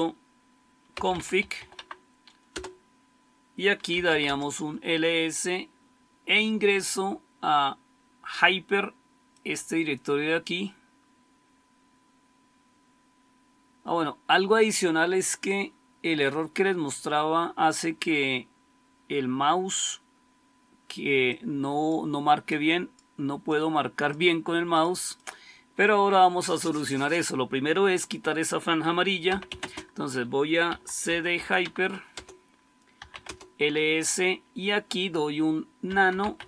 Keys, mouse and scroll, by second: 0.6-1.9 typing, 2.4 Return, 3.6-4.3 typing, 28.9-33.9 typing, 32.0 Return, 35.5-36.4 typing.